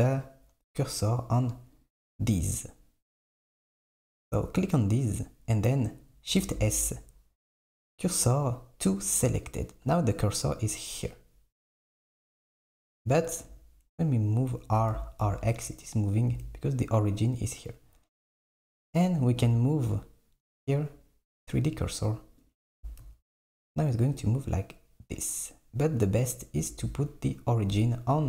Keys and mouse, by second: 1.8 click, 6.6 shift+s, 12.0 click, 13.5 r, 15.1 r, 19.3-22.3 drag, 22.5 click, 22.9 r.